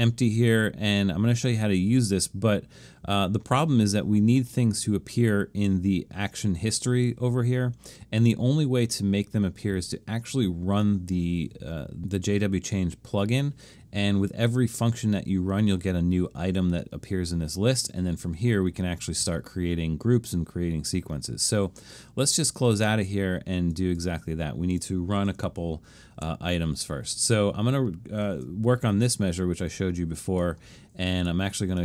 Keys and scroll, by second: 25.5 super+=, 26.2 super+=, 28.4 super+=.